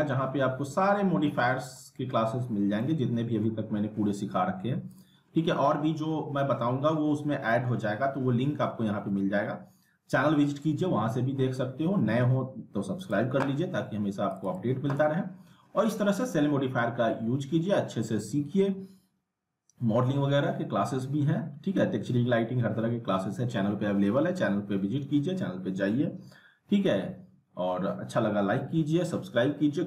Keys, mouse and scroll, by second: 0.7 click, 2.8-3.4 middle drag, 4.9 click, 13.0 click.